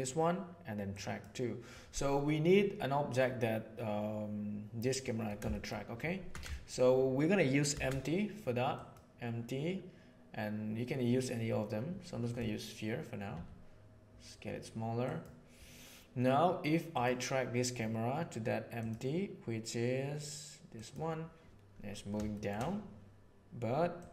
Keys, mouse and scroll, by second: 4.8-5.2 middle drag, 5.5 shift+middle click, 6.5 shift+middle click, 7.7 shift+a, 13.2 s, 16.8 right click, 18.8 click, 22.3 shift+click, 23.9 right click.